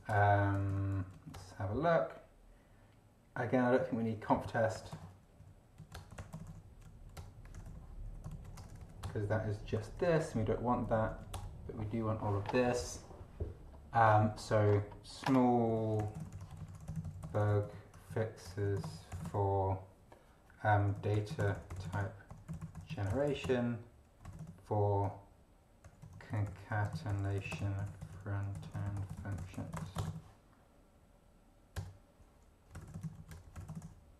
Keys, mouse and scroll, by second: 0.0-0.9 typing, 1.1 Right, 1.3 Return, 4.5-8.1 typing, 5.8 Right, 5.9 Return, 6.8 Right, 8.3 ctrl+Right, 8.6 ctrl+BackSpace, 9.0 ctrl+Return, 10.0 q, 10.3 Up, 10.8 space, 11.1 Right, 11.3 Return, 13.7-14.0 scroll down 2, 14.7-15.1 scroll down 1, 15.5-30.6 typing, 18.1 Right, 31.8 Return, 32.5-34.1 typing.